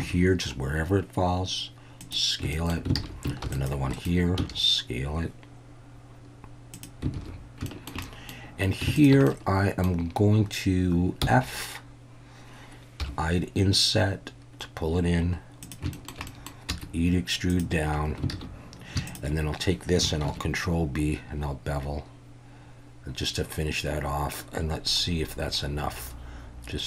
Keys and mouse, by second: 0.0 s, 2.0 click, 2.5 shift+middle click, 3.0 alt+a, 3.4 ctrl+r, 4.0 right click, 4.4 s, 6.7 click, 7.2 alt+a, 7.7 middle click, 8.0 middle click, 9.0 click, 9.2 middle click, 11.2 f, 13.0 i, 15.6 click, 15.9 shift+middle click, 16.3 middle click, 16.7 e, 17.5 click, 18.3 alt+a, 19.1 alt+shift+click, 20.2 ctrl+b.